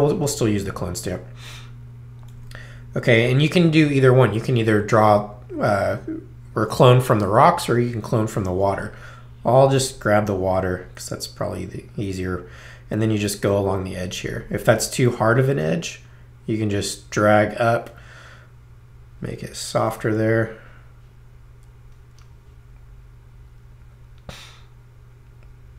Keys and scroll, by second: 0.5 s.